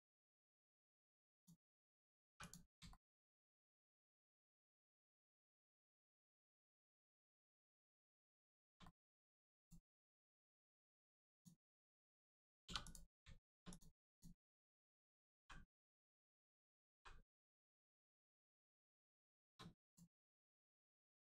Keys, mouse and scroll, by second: 1.3 click, 1.6 middle click, 2.2 3, 2.4 click, 2.8 shift+middle click, 3.5 shift+click, 3.8 middle click, 4.4 shift+middle click, 4.9 scroll up 1, 5.4 shift+middle click, 7.0 scroll down 1, 8.3 shift+middle click, 8.8 middle click, 9.5 click, 10.0 middle click, 10.3-11.3 scroll up 1, 11.3 click, 12.6 2, 12.8 click, 13.6 click, 15.2 g, 16.0 right click, 16.9 g, 17.3 middle click, 18.4 ctrl+click, 18.9 middle click, 19.3 shift+middle click, 19.8 click, 20.1 middle click.